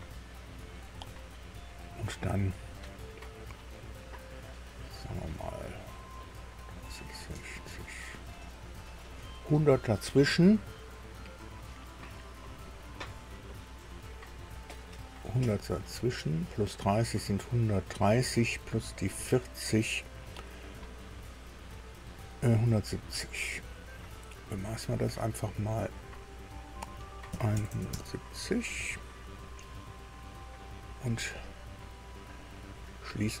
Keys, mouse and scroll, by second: 26.0 click, 27.3 KP_1, 27.5 KP_7, 27.7 KP_0, 27.9 KP_Enter, 31.0-31.3 scroll down 2, 31.6-33.4 scroll up 2.